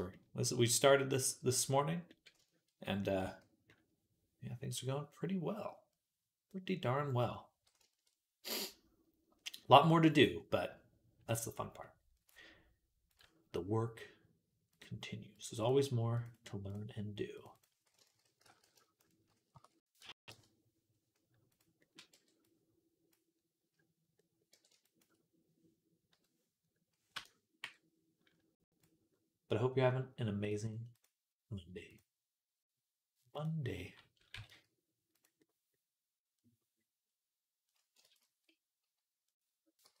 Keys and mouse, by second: 3.1 z, 15.5 click, 16.2-40.0 right drag, 17.4-21.4 drag, 21.9 b, 24.4 b, 25.9 ,, 27.5 m, 30.8 click, 31.7 click, 33.2-34.2 drag, 34.2 g, 37.9 ctrl+z, 39.7 g.